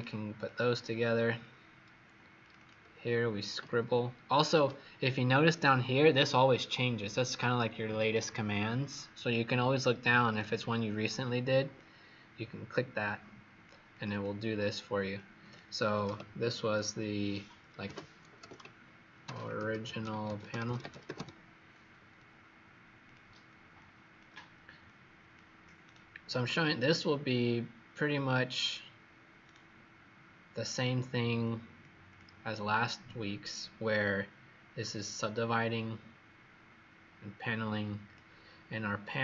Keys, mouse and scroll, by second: 1.0-1.9 scroll down 2, 1.9 scroll up 2, 2.3 click, 2.5-4.1 typing, 10.2 click, 14.0 click, 15.1 click, 17.7-21.6 typing, 22.9 click, 25.7 right click, 30.5 click, 32.0 click, 33.0-34.8 scroll down 3, 34.8 click.